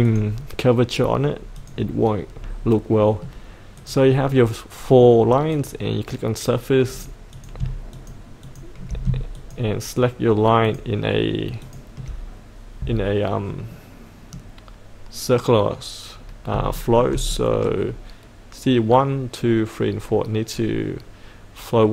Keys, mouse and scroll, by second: 2.3 scroll up 1, 2.9 middle click, 3.7-4.8 drag, 7.9 ctrl+click, 8.4 ctrl+click, 9.3 ctrl+click, 10.6 ctrl+click, 11.6 ctrl+click, 13.7-15.0 middle drag, 16.1-16.5 scroll down 1, 16.8 shift+middle click, 17.3 middle click.